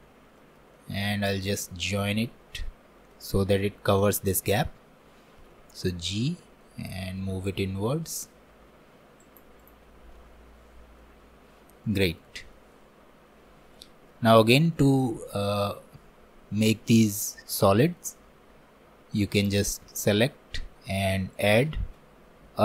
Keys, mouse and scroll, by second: 0.4 alt+middle click, 0.8 alt+middle click, 1.3 scroll up 1, 1.6-9.6 shift+middle drag, 9.6 click, 9.9 scroll down 1, 10.2-11.2 middle drag, 11.2-11.9 scroll down 1, 11.9-16.4 middle drag, 16.4 scroll down 1, 16.7 middle click, 17.2-17.8 scroll up 2, 17.8-19.4 shift+middle drag, 19.4-21.4 drag.